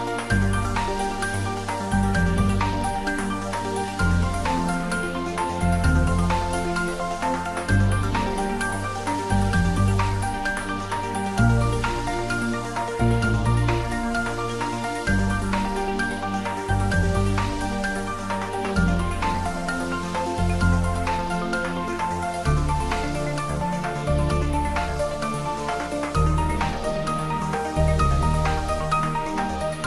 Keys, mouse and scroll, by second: 0.9 click, 2.1 click, 3.4 click, 8.1 click, 9.2 click, 11.5 click, 13.0 click, 13.7-14.0 scroll down 1, 15.3-18.2 drag, 19.1 `, 19.3 `, 20.1-20.9 scroll down 1, 21.1 click, 23.3 click, 25.2 scroll down 1, 25.4 middle click, 26.3 click.